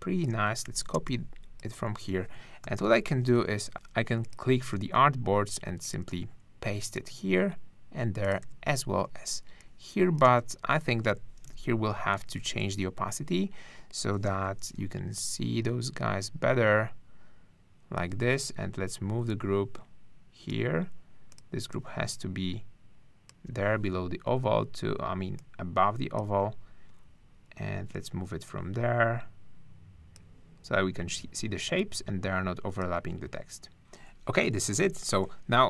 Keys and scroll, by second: 0.3 super+space, 0.6 super+c, 0.9 super+space, 1.9 space, 2.6 super+-, 3.7 shift+`, 4.6 shift+super+v, 6.1 super+v, 9.0 super+space, 11.4 super+=, 34.6 super+-.